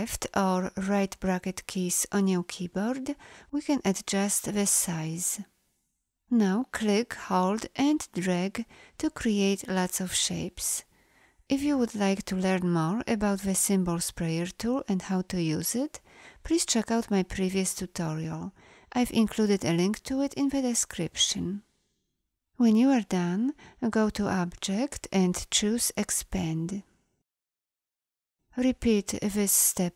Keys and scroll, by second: 1.0 ], 20.4 ctrl+z.